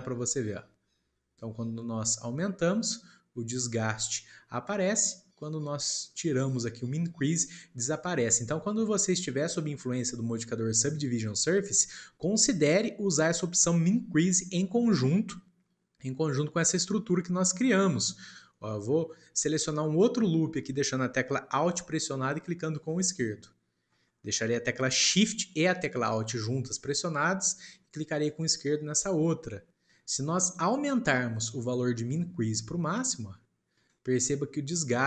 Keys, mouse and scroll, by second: 0.2-3.3 drag, 5.3-8.4 drag, 8.8 scroll down 2, 9.6-10.1 scroll down 1, 10.1-13.0 shift+middle drag, 17.3 shift+middle click, 18.1 scroll down 1, 18.5-21.5 shift+middle drag, 22.7 alt+click, 28.2 alt+shift+click, 32.1-35.0 drag.